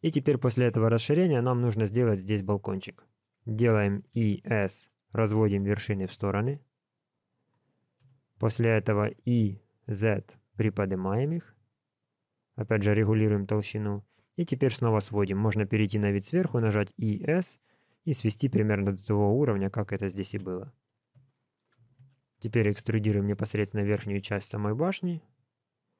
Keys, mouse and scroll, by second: 2.6 middle click, 3.9 e, 7.9 KP_1, 9.0 e, 13.3 middle click, 15.0 KP_7, 16.5 e, 20.2 KP_1, 21.3 shift+middle click, 22.0 e.